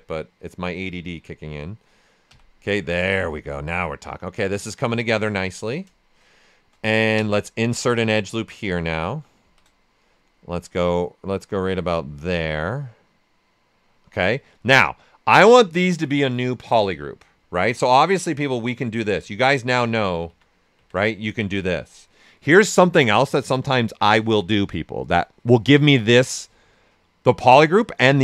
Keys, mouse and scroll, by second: 0.6 right click, 1.2 click, 1.6 right click, 2.2 d, 2.7 alt+right click, 3.2 shift+f, 5.4 ctrl+shift+right click, 7.1 space, 8.7 shift+f, 10.0-17.7 drag, 17.7-23.9 alt+drag, 18.8 typing.